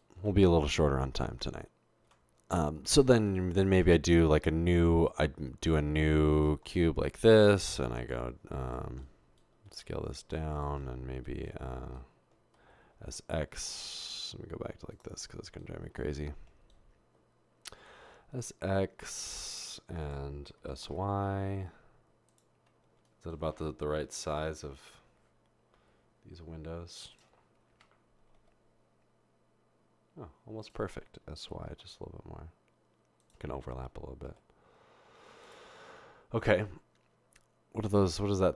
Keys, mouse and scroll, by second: 0.3 Tab, 2.1 Tab, 3.7 typing, 8.3 g, 9.7 typing, 12.6-13.0 typing, 18.0 typing, 20.6 typing, 24.0 typing, 25.8 typing, 27.7-28.4 typing, 31.4-32.2 typing, 34.3-36.0 typing.